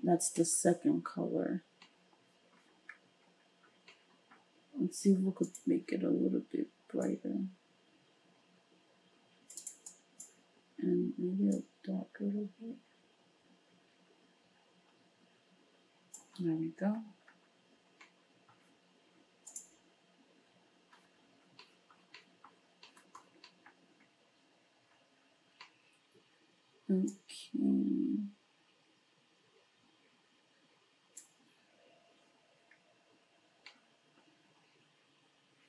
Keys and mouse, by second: 5.5 click, 5.7-9.9 middle drag, 9.9-19.5 drag, 19.5-27.1 middle drag, 27.1-35.6 drag.